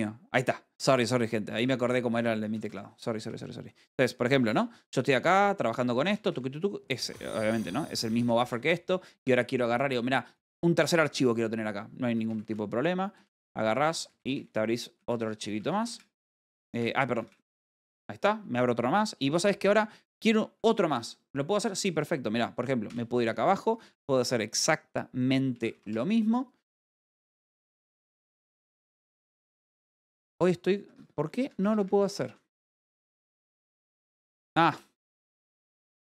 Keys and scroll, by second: 4.3 w, 6.7-7.4 typing, 12.9 space, 14.4 Escape, 18.7 w, 22.0 Escape, 23.3 j, 24.2 space, 27.1-27.9 typing.